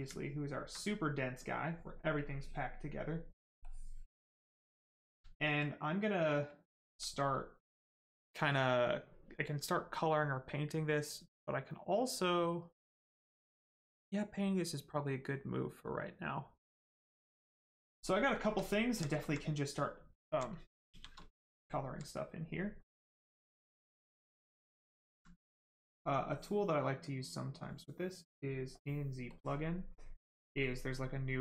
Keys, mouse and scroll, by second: 0.1 alt+right click, 0.7 right click, 0.7 right click, 2.2 click, 5.3 alt+right click, 6.1 right click, 6.1 right click, 6.5 alt+right click, 7.1 right click, 7.1 right click, 7.3 shift+right click, 17.7 right click, 18.3 shift+right click, 18.5 alt+right click, 19.6 right click, 19.7 right click, 19.7 alt+right click, 20.0 alt+right click, 20.8 shift+f, 21.2 right click, 21.3 right click, 21.7 alt+right click, 23.9 click, 24.7 alt+right click, 27.1 click, 29.3 click.